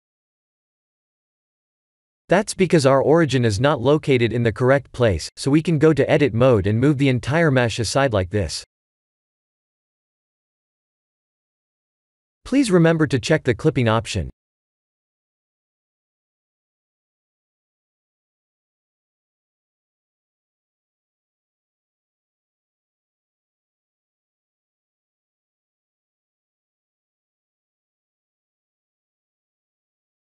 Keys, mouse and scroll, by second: 2.3 g, 4.1 ctrl+z, 4.7-5.3 scroll up 3, 5.0 Tab, 6.0 a, 7.2 g, 14.3 click, 14.9 g, 19.5 Tab, 20.1 middle click, 20.7 shift+z, 21.0 middle click, 22.2-23.1 scroll up 5, 23.1-23.5 scroll up 1, 23.5 scroll down 3, 24.2 Tab, 25.1 3, 25.4 click, 26.3 x, 27.7 Tab, 28.3 shift+z, 28.8 click, 29.1 middle click, 29.8 middle click.